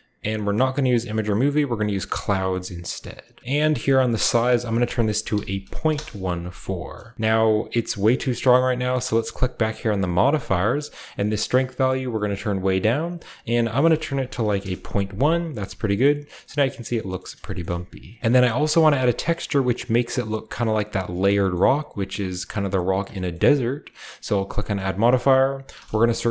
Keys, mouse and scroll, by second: 1.7 click, 2.5 middle click, 3.4-4.3 scroll down 1, 4.3 click, 5.5-5.9 typing, 7.3 middle click, 9.8 click, 12.0 click, 13.7 click, 14.4 typing, 14.6 Return, 15.4-16.1 scroll down 1, 16.0-16.8 middle drag, 16.1-16.8 scroll up 1, 16.1 typing, 17.1-18.3 shift+middle drag, 17.4-18.2 shift+scroll up 1, 18.2 ctrl+z, 18.5-20.9 shift+middle drag, 18.5 shift+scroll up 1, 21.4-23.0 shift+middle drag, 21.7-23.0 shift+scroll up 1, 23.1-24.6 shift+middle drag, 23.5-24.6 shift+scroll down 1, 24.6 click, 24.6-25.7 scroll down 1, 25.7 typing.